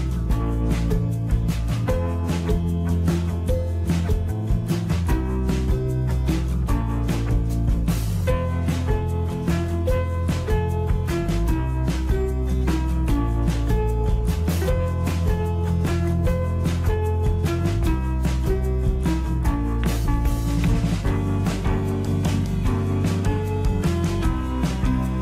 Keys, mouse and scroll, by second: 9.2 click, 10.1-18.1 middle drag, 18.8 click, 20.1 middle click, 21.0-22.3 scroll down 1, 22.4-23.0 scroll up 1, 23.0-25.2 middle drag.